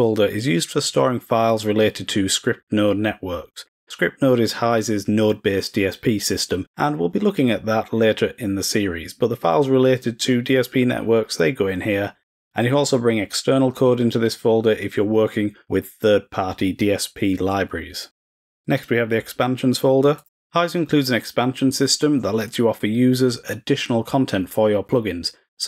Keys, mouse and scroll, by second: 20.1 click.